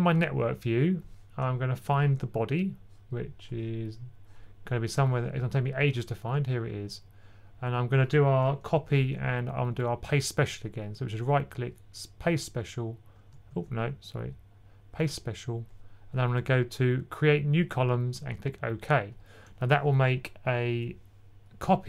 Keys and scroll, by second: 9.0 super+c, 13.4 super+z.